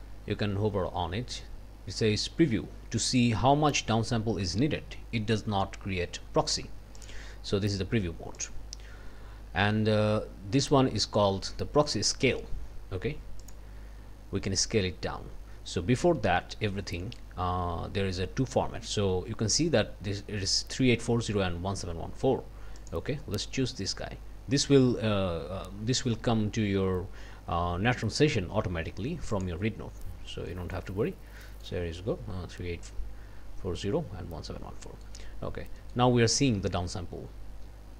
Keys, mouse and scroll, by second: 7.0 click, 8.4 click, 13.4 click, 16.9 click, 22.8 click, 29.3 click, 30.5 click, 31.1 scroll down 2, 31.4 click, 34.8 click, 35.8 click.